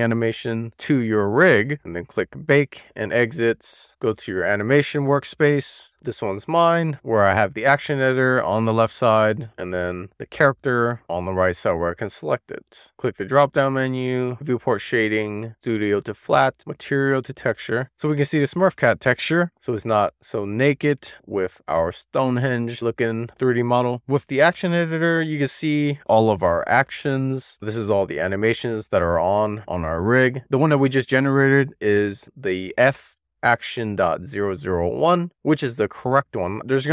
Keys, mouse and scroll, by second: 4.1 click, 7.4 shift+middle click, 7.9-8.8 middle drag, 9.0-9.7 scroll up 2, 9.7-10.8 scroll down 1, 12.8-17.8 drag, 18.1 click, 19.7-23.1 drag, 24.6-27.1 drag, 27.8-28.8 scroll up 11, 28.8 click, 30.0 click, 30.9-36.9 drag.